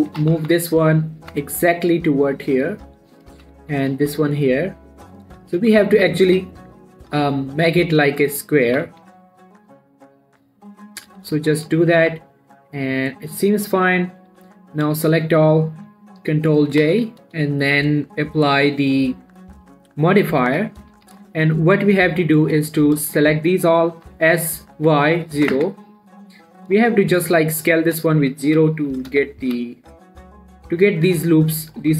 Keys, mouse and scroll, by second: 0.0-0.5 shift+scroll up 3, 0.5 g, 0.8 x, 1.3-1.7 ctrl+scroll down 1, 3.1 click, 3.7 g, 4.0 x, 5.5 click, 6.1 scroll down 1, 6.4 g, 6.6 y, 8.0 click, 9.1 g, 9.2 y, 11.3 click, 11.5 z, 12.4 z, 12.6 scroll down 1, 12.8-14.7 middle drag, 14.7 7, 15.2 click, 17.1 ctrl+j, 18.3 click, 20.8 scroll up 1, 20.9 Tab, 21.3 z, 21.6 shift+middle click, 21.9-22.3 scroll up 1, 22.3-24.4 drag, 24.4 s, 25.2 y, 26.6 typing, 26.6 shift+middle click, 27.2 shift+scroll down 1, 27.3-27.7 shift+scroll up 1, 27.8 middle click, 28.0 scroll down 1, 28.1 shift+middle click, 28.9 typing, 30.6-31.9 drag.